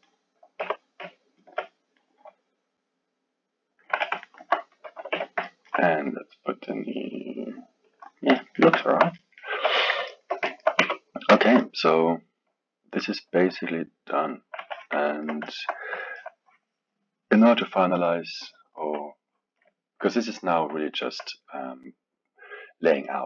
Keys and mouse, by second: 0.6 g, 2.0-3.9 middle drag, 3.9 KP_1, 4.2 alt+middle click, 5.1 KP_3, 5.4-6.6 alt+middle drag, 6.6 click, 8.4-9.5 ctrl+middle drag, 9.5 KP_1, 10.1-10.8 ctrl+middle drag, 10.8 Tab, 11.4-14.6 alt+middle drag, 14.6 KP_1, 15.1-18.8 ctrl+middle drag, 18.8 KP_1, 20.9-23.2 alt+middle drag.